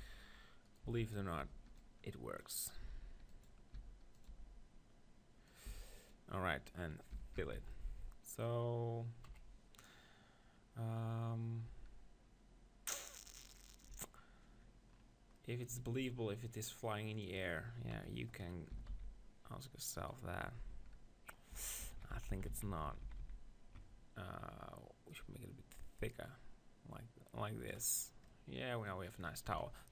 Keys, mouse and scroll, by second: 0.6-2.5 drag, 0.9 z, 1.4 b, 2.5 middle click, 2.8 e, 3.0-5.0 drag, 3.7 s, 4.3 g, 5.7 s, 7.2 f, 7.4 Tab, 7.6 z, 7.7 click, 7.8-9.6 middle drag, 9.3 KP_1, 9.9 middle click, 11.7 Tab, 13.9 Tab, 14.6-16.7 middle drag, 17.9 KP_1, 18.5-20.1 middle drag, 18.7 s, 20.1-21.5 drag, 20.7 Tab, 21.5 Tab, 22.0-23.2 ctrl+z, 25.3-26.4 drag, 28.3-29.9 middle drag, 29.5 KP_1.